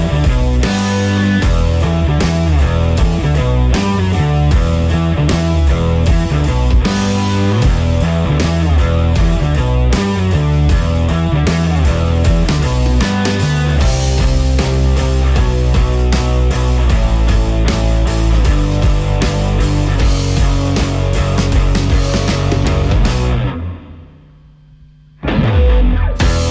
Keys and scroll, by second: 7.3 Delete, 11.7 Delete, 16.0 Delete, 20.0 Delete.